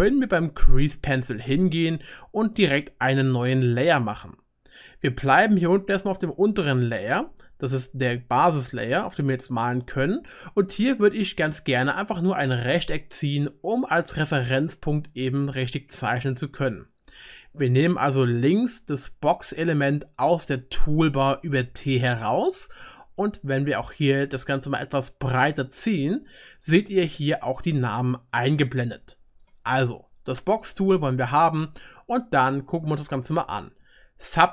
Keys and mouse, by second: 2.1-3.9 drag, 6.2-7.7 drag, 7.7-15.7 right drag, 15.7 click, 15.8 right click, 15.9 click, 16.0-17.7 right drag, 17.7 click, 17.8 right click, 17.9 click, 18.0-19.4 right drag, 19.4 click, 19.9-21.8 right drag, 21.5 t, 21.8 click, 21.9-24.7 right drag, 21.9 t, 24.7-25.8 drag, 25.4 middle click, 25.4 right click, 26.4 click, 26.4 middle click, 26.4 right click, 26.8 click, 26.8 middle click, 26.8 right click, 33.8-34.5 drag, 33.8-34.5 middle drag, 33.8-34.5 right drag.